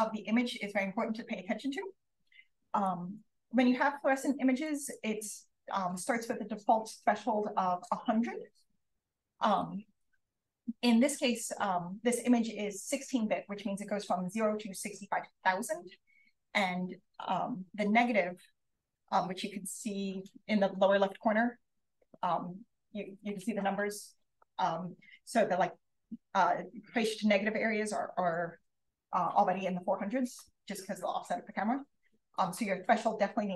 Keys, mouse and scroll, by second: 4.6 click, 10.4 click, 10.7-11.7 scroll down 1, 11.7-13.0 scroll down 1, 13.0-15.8 scroll down 1, 15.8-16.5 scroll down 1, 16.5 scroll down 1, 16.8-18.4 scroll up 1, 18.4-19.3 scroll up 1, 19.3-20.4 scroll up 1, 20.4-23.2 scroll up 1, 23.2-24.5 scroll up 1, 24.5-24.9 scroll up 1, 32.3 click.